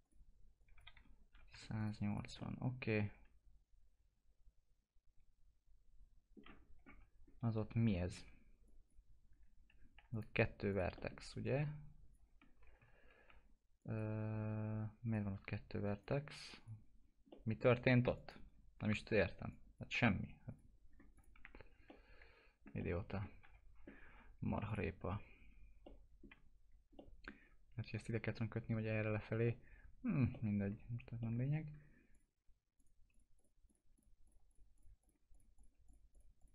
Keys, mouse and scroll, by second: 0.9 1, 1.8 click, 2.4 middle click, 2.7 scroll down 1, 3.0-6.6 alt+middle drag, 6.6 scroll up 1, 6.9 F4, 7.2 scroll up 1, 8.1 1, 8.6 click, 10.1 click, 11.4 click, 12.4 scroll up 1, 13.8 click, 17.0 scroll down 1, 17.3 middle click, 18.1 click, 20.9 scroll down 1, 21.1 click, 21.4 F4, 21.9 middle click, 22.8 middle click, 23.4 F4, 24.7 click, 25.8 alt+middle click, 26.6-26.9 scroll up 1, 27.0 alt+middle click, 29.4 middle click, 30.3 alt+middle click, 32.1 click, 32.8 ctrl+click.